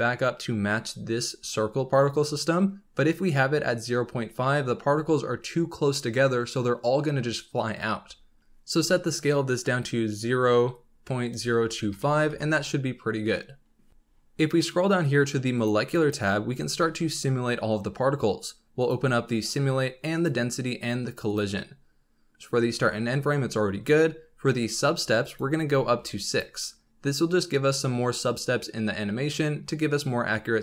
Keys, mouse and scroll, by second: 8.4-10.5 drag, 13.9-14.3 scroll down 16, 15.5 click, 15.9-16.3 drag, 16.3-17.6 scroll down 12, 18.7-19.1 drag, 19.1-19.8 scroll down 6, 20.1-20.6 drag, 20.6-21.2 scroll down 1, 21.2-21.6 drag, 21.6-23.2 scroll down 4, 25.2-26.4 drag.